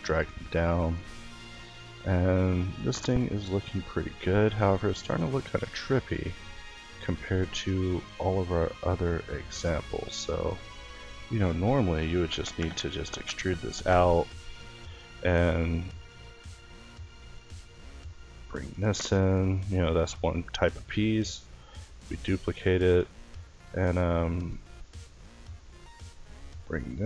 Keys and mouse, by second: 1.0 Tab, 3.5 a, 4.6 middle click, 6.7 middle click, 10.0 e, 13.9-15.9 middle drag, 17.0 e, 18.0 middle click, 18.4 Tab, 19.3 Tab, 19.6 a, 20.3 l, 22.6 middle click, 23.2-26.0 middle drag, 26.0 e.